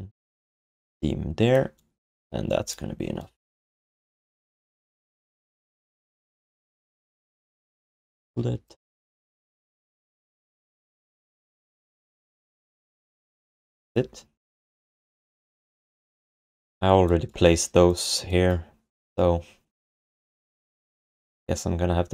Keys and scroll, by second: 13.0 ctrl+s, 13.5 alt+q, 16.4 ctrl+s.